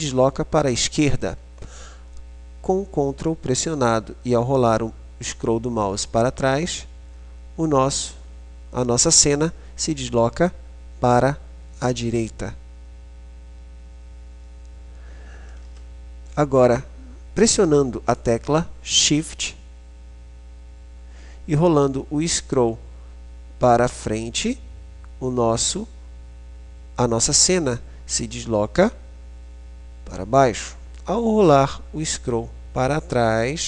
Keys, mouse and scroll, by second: 4.9-12.8 middle drag, 26.6 middle click, 27.3-31.1 middle drag, 31.6 middle click.